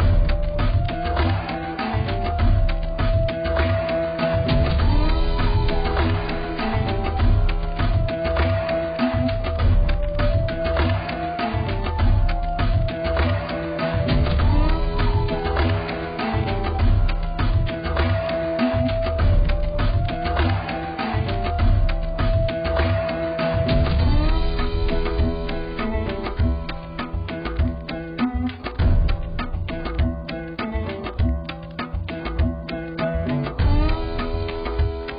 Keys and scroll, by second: 6.6-7.5 ], 7.8-8.4 ], 32.2 b.